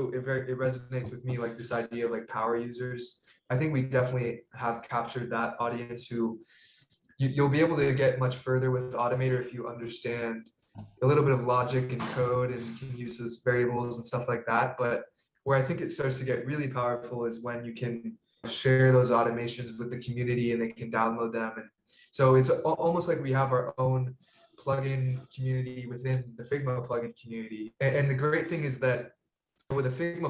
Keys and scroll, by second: 8.2 super+space, 8.4-9.3 typing, 9.3 Return.